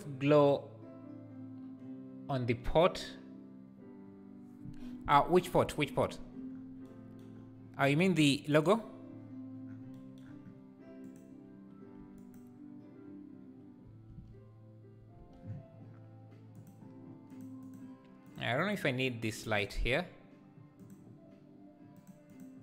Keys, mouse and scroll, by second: 8.7 click, 12.2 click, 14.3 ctrl+s, 16.6 click, 17.3 click, 17.7 click, 18.3 click, 18.7 click, 19.5 click, 20.8 click, 22.0 click, 22.3 click.